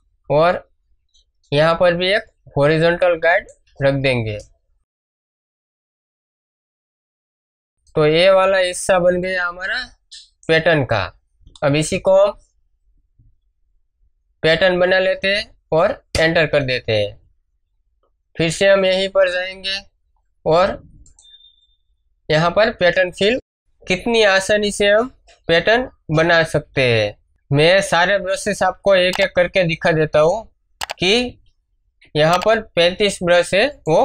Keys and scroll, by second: 4.2 Return, 6.6 m, 11.6 alt+e, 11.9 alt+d, 16.1 Return, 18.3 ctrl+Tab, 29.7 ctrl+Tab, 31.8 ctrl+d.